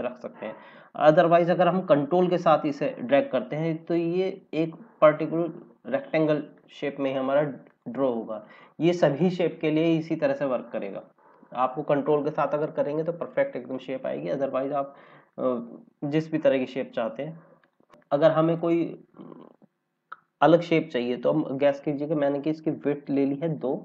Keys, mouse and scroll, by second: 14.9 click, 16.8 ctrl+z, 17.5 click, 17.9 click, 23.2 KP_2.